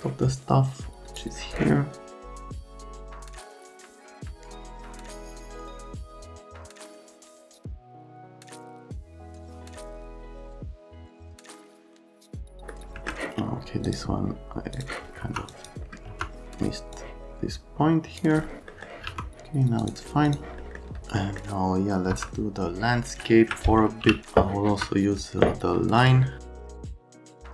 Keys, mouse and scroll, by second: 2.3-3.1 typing, 4.3 `, 4.4 `, 4.6 F3, 5.1 click, 6.2 click, 6.5 shift+click, 7.0 F3, 8.1 F3, 8.5 1, 9.4 click, 9.6 click, 9.7 right click, 9.9 click, 10.3 F3, 10.4 click, 10.8 click, 11.1 right click, 11.3 right click, 11.4 alt+right click, 11.7 F3, 15.2 F3, 15.5 click, 19.0 1, 20.6 middle click, 21.1 middle click, 22.1 F3, 24.0 e, 24.7 F3, 26.0 click, 26.6 middle click, 26.7 middle click, 27.1 right click.